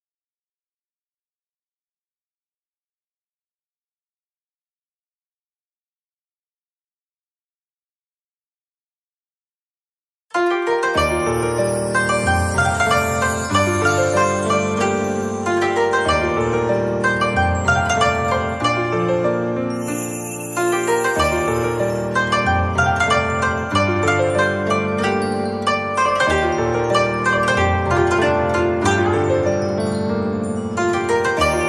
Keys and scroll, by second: 4.7 ctrl+shift+], 10.9 z, 11.7 space, 15.8 space, 16.4 z, 17.4 space, 21.2 space, 24.3 a.